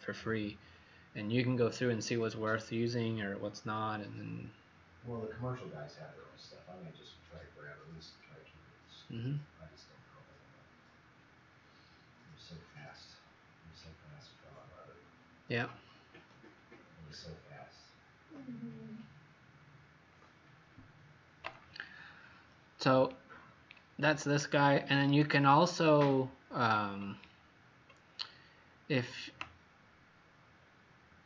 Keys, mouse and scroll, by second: 23.2-23.7 scroll down 5, 24.5 scroll down 1, 25.1-25.6 scroll up 2, 27.0 scroll down 1, 27.8 scroll up 1.